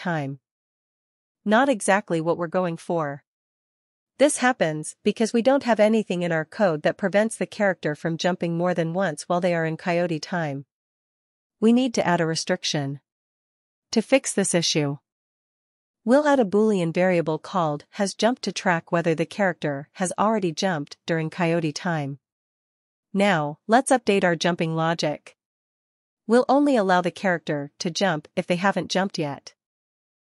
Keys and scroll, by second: 0.4 Left, 1.8 Up, 2.6 Right, 3.1 Up, 17.4-20.8 typing, 27.6-30.2 typing.